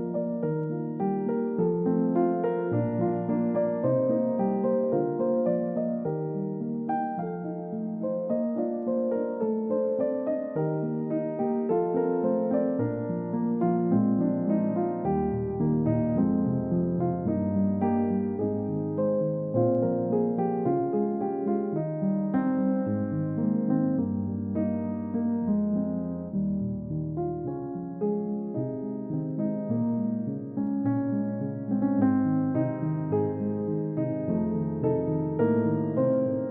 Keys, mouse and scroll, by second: 2.7 space, 8.5 scroll down 1, 8.9 middle click, 9.7 double click, 14.1-14.7 scroll up 1, 17.8 scroll up 1, 18.3 scroll down 1, 23.0 scroll up 1, 23.6 middle click, 31.9 scroll down 1, 32.7 middle click, 34.7-36.0 scroll up 1, 36.1-36.4 scroll down 1.